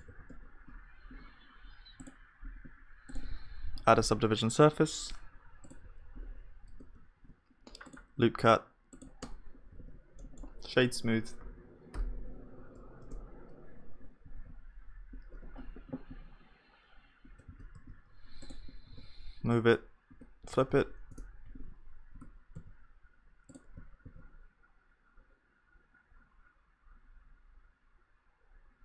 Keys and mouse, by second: 0.1 ctrl+s, 0.3 KP_1, 0.7-2.8 middle drag, 3.4 click, 6.7 Tab, 6.7 click, 7.1 ctrl+r, 9.2 Tab, 9.8 ctrl+s, 10.2-12.5 middle drag, 11.9 F3, 14.3 ctrl+s, 15.4 KP_1, 17.5 shift+d.